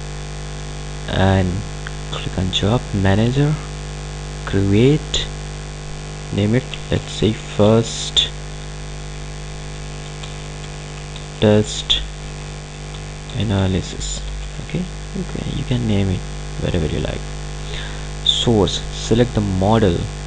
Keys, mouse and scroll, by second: 6.7-15.1 typing, 17.1 click.